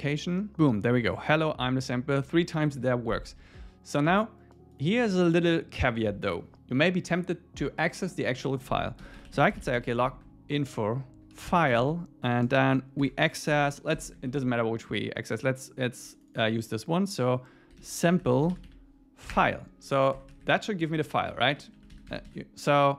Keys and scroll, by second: 13.5 alt+8, 14.1 ↻, 19.3 Return, 20.2 ⟳, 20.8 Right, 21.3 Left, 21.6 Right, 21.8 Left, 21.9 super+s.